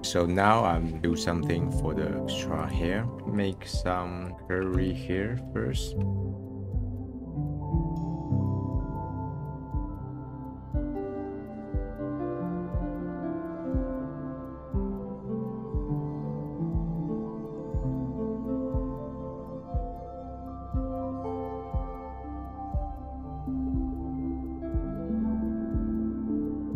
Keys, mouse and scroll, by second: 0.0 click, 2.5 click, 3.2 middle click, 3.4 click, 3.8 shift+a, 6.2 BackSpace, 6.5 BackSpace, 7.2 middle click, 7.4 scroll up 6, 7.5 click, 7.8 middle click, 8.2 click, 8.5 click, 9.1 click, 9.4 click, 9.6 click, 9.9 middle click, 10.1 click, 10.2 middle click, 10.4 click, 10.5 middle click, 10.9 middle click, 11.2 click, 11.4 middle click, 11.9 click, 12.2 middle click, 12.3 click, 12.4 scroll down 1, 12.4 scroll up 1, 12.5 click, 12.8 middle click, 12.9 click, 13.1 middle click, 13.2 middle click, 13.3 click, 13.4 middle click, 13.6 scroll up 1, 13.6 scroll down 1, 13.7 click, 13.8 f, 14.2 middle click, 14.5 click, 14.6 middle drag, 14.7 click, 15.1 middle click, 15.2 click, 15.3 middle drag, 15.3 click, 15.5 middle click, 15.7 click, 15.9 middle click, 15.9 click, 16.1 middle click, 16.2 f, 16.2 click, 16.6 middle click, 16.7 click, 16.7 f, 17.0 click, 17.2 middle click, 17.5 click, 17.8 middle click, 17.9 click, 18.3 click, 18.5 f, 18.6 click, 18.9 middle click, 18.9 click, 19.1 middle click, 19.3 click, 19.4 click, 19.6 middle click, 19.7 click, 19.8 middle click, 20.0 click, 20.2-20.8 scroll up 4, 20.2 middle click, 20.5 click, 20.7 middle click, 20.8 middle click, 21.0 click, 21.2 middle click, 21.5 click, 21.9 middle click, 22.2 middle click, 22.3 click, 23.0 click, 23.1 middle click, 23.2 click, 23.2 middle click, 23.4 click, 23.5 middle click, 23.8 click, 23.8 middle click, 23.9 scroll down 6, 24.0 click, 24.5 click, 24.7 click, 24.7 shift+a, 25.3 BackSpace, 25.6 click, 25.7 o, 26.0 scroll up 5, 26.2 middle click, 26.3 middle click, 26.4 scroll down 1.